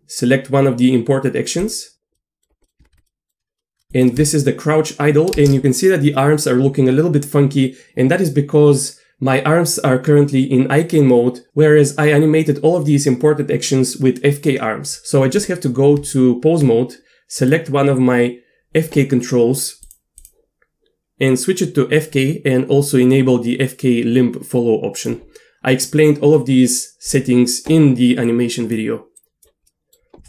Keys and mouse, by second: 2.1 middle drag, 2.6 middle drag, 2.9 Tab, 2.9 z, 3.1 click, 3.9 shift+space, 3.9 click, 5.3 shift+space, 5.6 shift+space, 16.0 Tab, 17.4 click, 19.9 click, 20.2 click, 21.3 click, 23.6-25.1 drag, 26.4 middle click, 26.6 click, 26.6 right click, 27.1 click, 28.3 click, 29.2 click, 29.7 middle click.